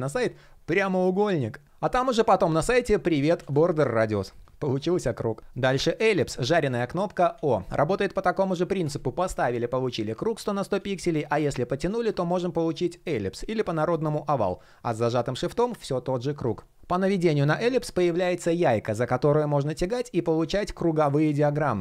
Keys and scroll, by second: 5.2 shift+p, 7.0 super+z, 10.4 super+z.